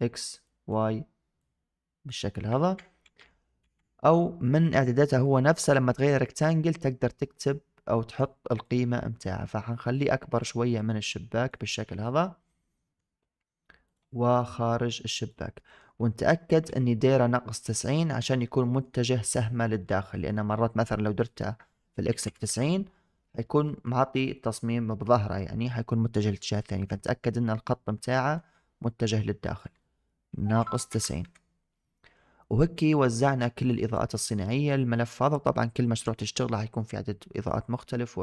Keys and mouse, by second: 0.4 click, 1.3 click, 2.5 ctrl+z, 2.9 ctrl+z, 3.5 ctrl+z, 6.3-8.0 drag, 8.5-10.3 drag, 10.6 click, 11.9-12.9 middle drag, 13.8 click, 14.1 middle click, 14.8 click, 15.4 middle drag, 18.0-18.7 middle drag, 19.9 middle drag, 21.3-22.3 drag, 23.5 middle drag, 28.0 middle click, 29.3-31.1 drag, 32.8 middle drag, 33.5 click, 33.8 middle click, 34.9 middle click.